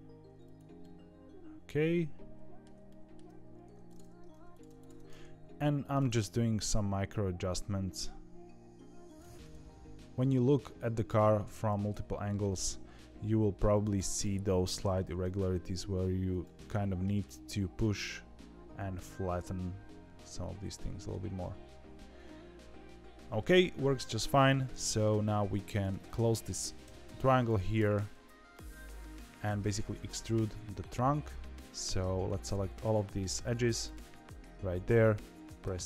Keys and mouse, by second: 0.7-2.6 middle drag, 2.8 shift+middle click, 3.6 2, 3.8 click, 5.0 middle click, 5.9 g, 9.3-10.5 middle drag, 11.0 click, 11.3 middle click, 11.6 g, 14.1 click, 15.0 g, 16.5 middle click, 17.2-21.0 middle drag, 21.4-23.3 middle drag, 23.5 shift+middle click, 25.4 2, 25.7 click, 26.8 f, 27.3 click, 27.7 f, 28.4 middle click, 33.8 KP_7, 35.6 e.